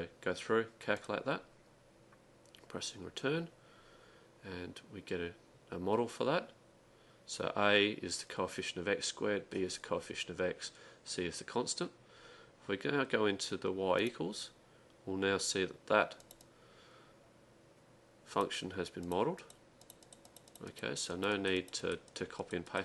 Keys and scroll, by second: 16.1-16.8 typing, 19.7-21.0 typing.